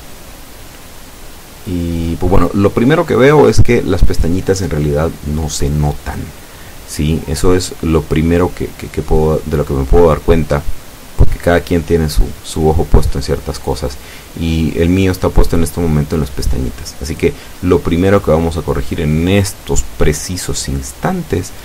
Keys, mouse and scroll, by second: 0.4 click, 0.9 scroll down 1, 1.8 scroll up 2, 2.2 scroll down 2, 3.9 F12.